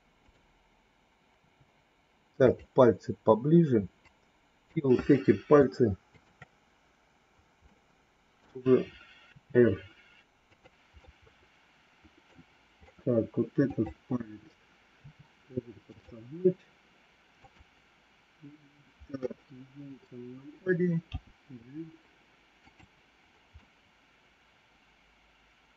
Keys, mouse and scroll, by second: 4.0 click, 6.1 shift+click, 7.5 middle click, 9.2 r, 10.8-12.2 middle drag, 13.6 click, 14.8 r, 17.3 click, 19.1 KP_1, 21.1 g, 23.6-25.7 middle drag.